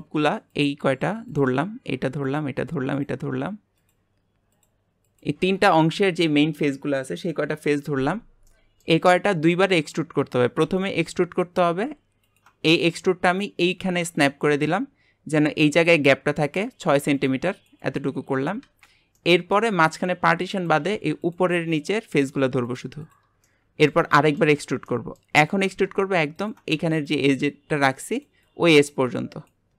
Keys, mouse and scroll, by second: 0.5 shift+click, 1.3 shift+click, 2.3 shift+click, 2.9 shift+click, 3.8 shift+click, 4.5 shift+click, 5.1 shift+click, 8.5-10.7 middle drag, 10.7 e, 19.2-20.5 middle drag, 20.5 click, 21.2 shift+click, 21.8 shift+click, 22.1 shift+click, 22.7 shift+click, 23.0 shift+click, 23.4-25.5 middle drag, 25.5 e.